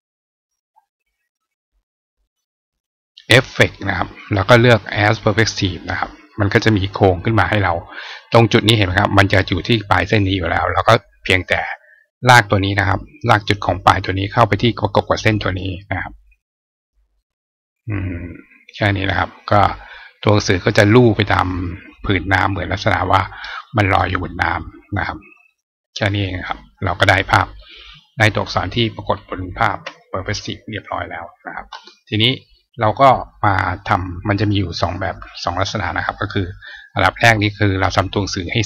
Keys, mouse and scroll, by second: 5.2 click, 13.5-15.2 drag, 17.0-18.6 drag, 20.5-21.8 drag, 24.4 click, 25.3 click, 27.0 click, 27.7 click, 29.5 shift+click, 30.1-31.2 drag, 34.6 click, 36.1 click, 37.3 click, 38.0 click.